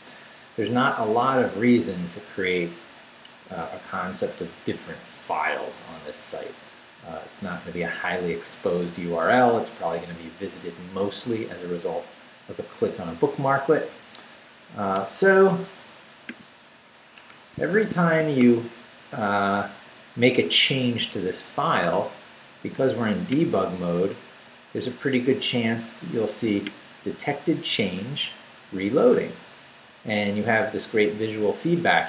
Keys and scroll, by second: 17.2 Escape, 17.7 shift+;, 18.1 shift+w, 18.4 Return, 20.8 Down.